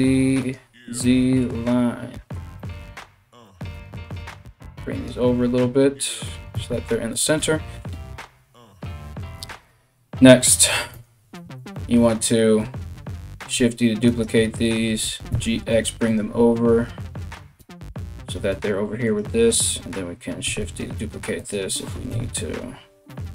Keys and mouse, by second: 3.1 g, 5.9 g, 10.5 Tab, 13.0 shift+d, 14.6 g, 17.2 g, 18.7 right click, 20.1 shift+d, 21.7 KP_1, 22.7 r.